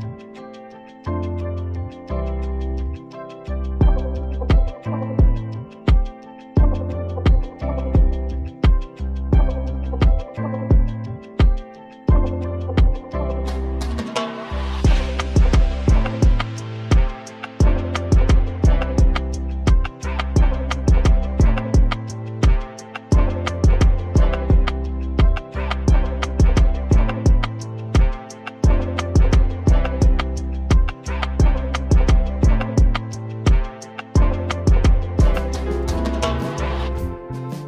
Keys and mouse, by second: 0.0 KP_7, 1.6 i, 3.2 e, 5.3 x, 8.5 ctrl+r, 16.6-17.7 drag, 18.1-19.9 drag, 19.9 Tab, 20.6-21.8 drag, 21.2 Tab, 22.5 Tab, 23.5 Tab, 25.4 click, 25.4-27.1 right drag, 27.1-28.3 drag, 28.8 ctrl+z, 29.5 right click, 30.3 click, 30.4 right click, 35.6-37.5 right drag, 36.8-37.6 drag.